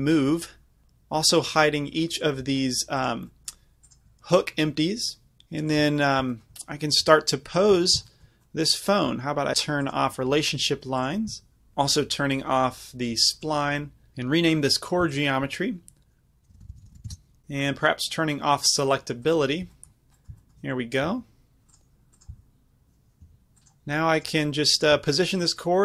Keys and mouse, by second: 1.5-4.1 drag, 5.4 h, 5.7-11.7 drag, 7.1 g, 13.4 click, 15.2-25.6 drag, 21.1 g, 22.4 z, 23.3 g, 25.0 g.